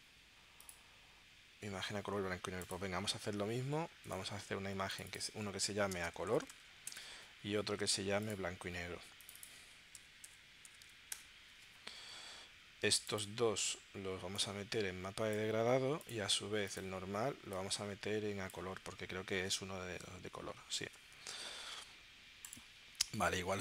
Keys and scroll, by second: 5.7-6.6 typing, 6.9 Return, 10.0 shift+b, 10.3 shift+6, 10.7 shift+n, 11.1 Return, 19.4 super+Tab, 20.9 super+Tab.